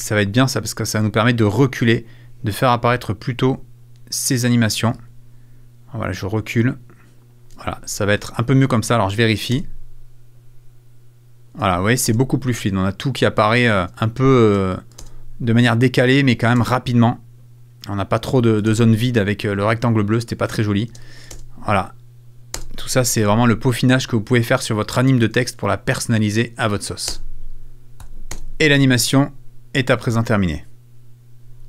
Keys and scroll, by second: 2.2 super+a, 9.5 space, 11.5 space, 14.4 space, 18.2 space, 20.9 space, 22.6 space, 23.2 super+space, 25.2 space, 27.1 space, 28.0 Up, 28.3 space.